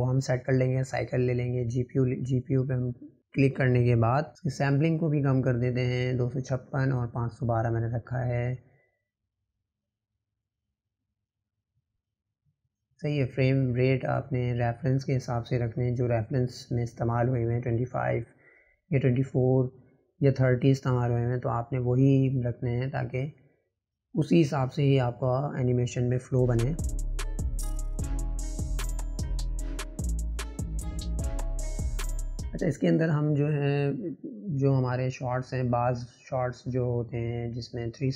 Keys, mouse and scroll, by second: 17.9-18.9 drag, 18.9 KP_0, 20.7-22.4 drag, 22.9-24.7 drag, 26.0 click, 26.6 click, 27.2 click, 30.9 click, 31.7-32.2 drag, 34.7 click, 35.5-37.6 drag.